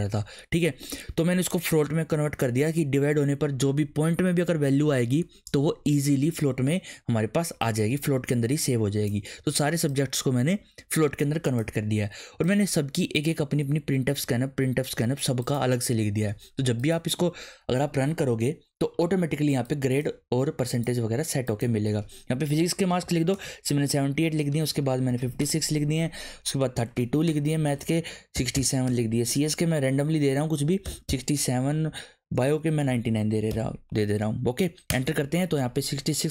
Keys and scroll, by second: 22.6-23.6 typing, 24.8-29.0 typing, 30.6-33.5 typing, 34.9 Return.